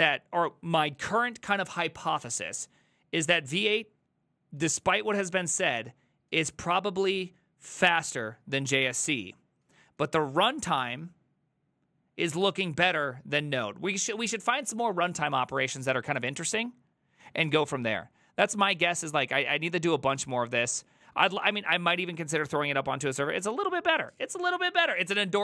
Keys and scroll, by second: 25.2 alt+{.